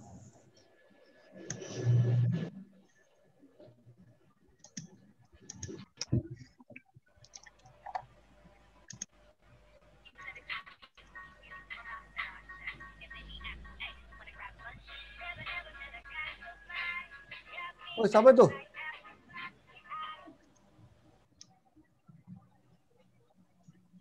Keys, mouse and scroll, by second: 3.8-7.6 click, 7.8 click, 10.1 r, 15.3-15.7 click, 16.4 click, 17.7 click, 19.5 r.